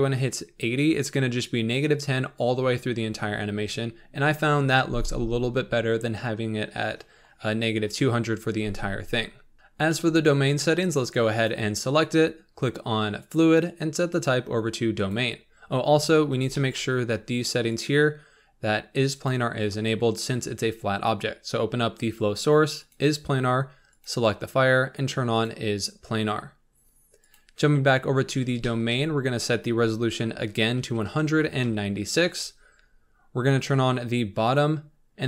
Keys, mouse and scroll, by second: 2.0-3.4 scroll down 10, 3.4-5.5 scroll up 3, 9.5-11.4 shift+middle drag, 11.4 click, 13.3-15.6 drag, 15.6-16.5 scroll up 8, 16.5-17.8 shift+middle drag, 17.8 click, 22.7 click, 24.0 click, 25.3 click, 27.3 click, 27.9-28.6 scroll down 8, 28.6-31.7 shift+middle drag, 31.7-34.6 drag.